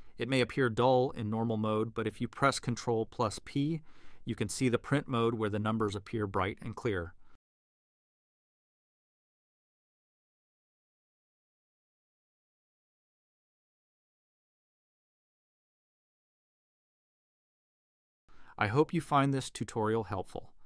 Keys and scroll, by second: 7.2 ctrl+p.